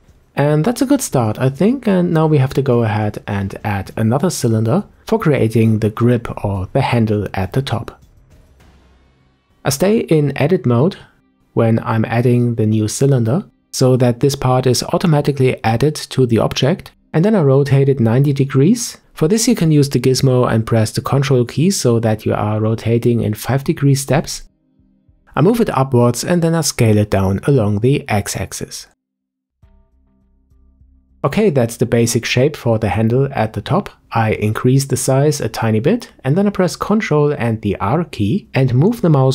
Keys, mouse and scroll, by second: 4.0 Tab, 5.6-8.7 scroll down 1, 9.2 Tab, 10.6 shift+a, 15.7 click, 17.8 ctrl+click, 23.5 click, 27.7 click, 30.1-30.5 scroll up 1, 30.5 shift+middle click, 31.0 scroll up 3, 32.4 s, 37.6 ctrl+r.